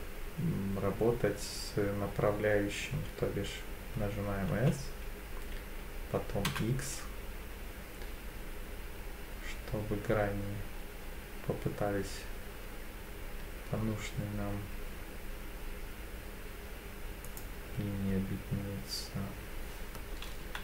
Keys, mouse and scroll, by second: 4.5 s, 6.5 x, 17.2 click, 18.0 s, 20.4 y.